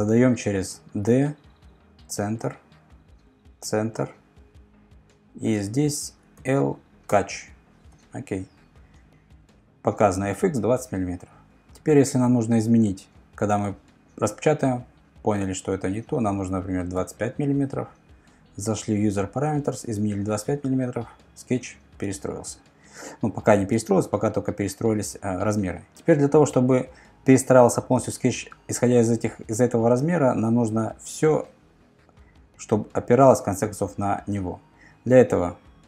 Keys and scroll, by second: 0.9 d, 6.4 shift+l, 7.1 Return, 7.9 Return, 15.0 Left, 15.3 Left, 15.7 5.